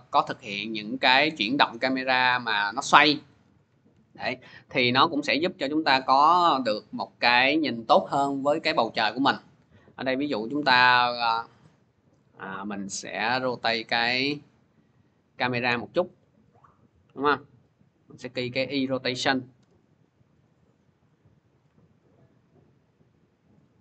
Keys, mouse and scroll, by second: 0.8 click, 1.2 middle click, 1.3 middle click, 1.4 middle click, 1.8 scroll, 2.1 click, 3.1 r, 13.7 click, 15.9 ctrl+z, 18.2 click, 19.0 click, 19.4 u, 21.0 click.